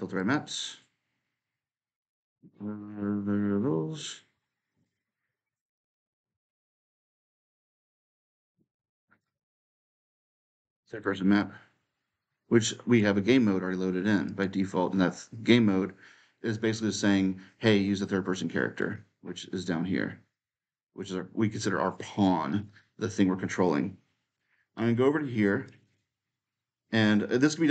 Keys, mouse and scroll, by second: 4.6-6.7 drag, 9.0-13.0 drag, 14.0-16.2 drag, 18.6-20.7 drag, 22.3 click, 25.4-27.7 drag.